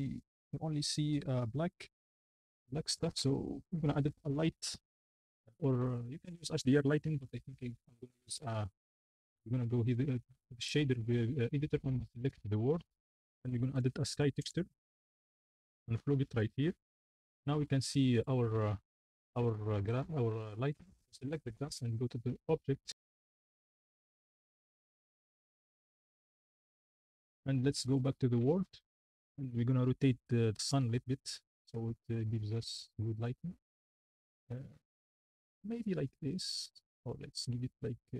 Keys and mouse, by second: 4.6 shift+a, 6.3 click, 7.7 shift+a, 9.3-10.6 drag, 11.6-13.0 drag, 13.6 shift+a, 15.6 drag, 17.9 shift+middle drag, 20.9 click, 21.9-22.6 drag, 28.0-28.8 drag, 30.5 right click, 32.1 right click, 34.6 right click, 35.6-36.9 right drag.